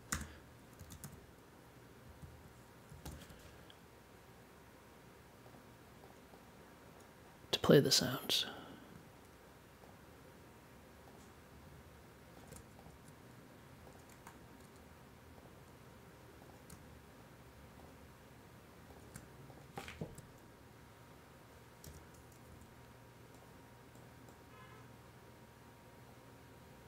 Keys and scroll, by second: 0.0-2.2 typing, 3.0 super+j, 21.8 m, 22.5 1.